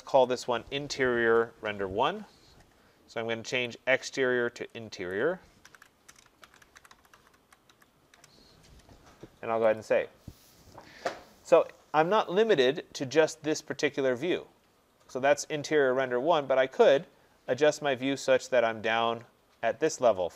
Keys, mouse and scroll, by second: 0.2 click, 5.1 click, 5.7-8.2 typing, 9.8 click, 16.4 middle click, 16.5 middle click, 16.7 middle click, 17.0-18.0 middle click, 17.2 middle click, 17.8 middle click, 18.4 middle click, 18.5 middle click, 18.9 middle click, 19.0 middle click.